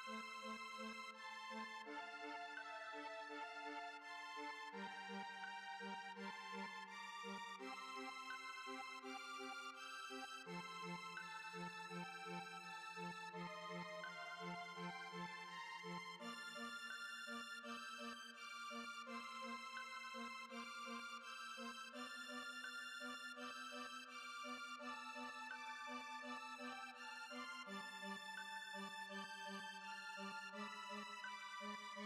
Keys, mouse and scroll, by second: 0.8 right click, 1.8 click, 2.3 click, 5.9 click, 6.3 middle click, 9.9-13.8 drag, 18.9-20.0 drag, 23.2 middle click, 23.9-26.1 drag, 26.1 middle click, 26.3 click, 26.8 middle click, 27.3 click, 28.1 middle click, 28.4 click, 29.0 middle click, 29.7-32.0 drag.